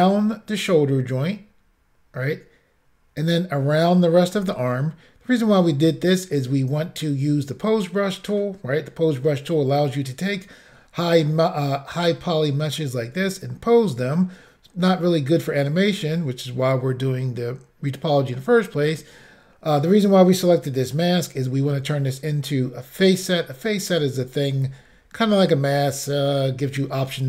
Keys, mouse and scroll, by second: 10.7-11.3 scroll up 1.